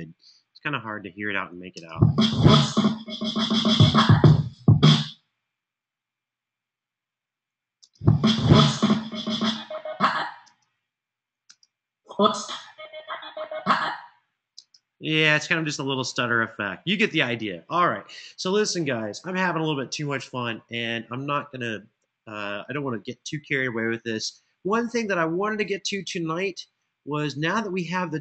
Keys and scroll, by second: 1.5 space, 4.6 space, 7.5 space, 10.2-11.2 typing, 14.3 space.